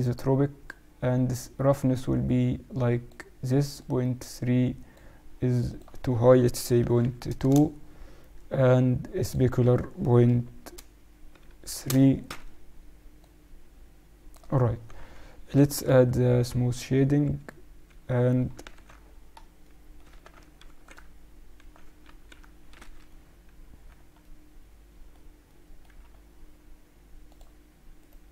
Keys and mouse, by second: 1.9-5.6 drag, 5.6-7.5 drag, 9.1-11.1 drag, 13.1-14.9 drag, 15.8 t, 16.6-18.6 drag, 17.2 t, 18.6 middle click, 18.7 ctrl+1, 20.0 Tab, 20.6 ctrl+r, 21.2 middle click, 22.0 ctrl+r, 23.0-27.2 middle drag, 27.2-28.3 drag, 27.9-28.3 right drag.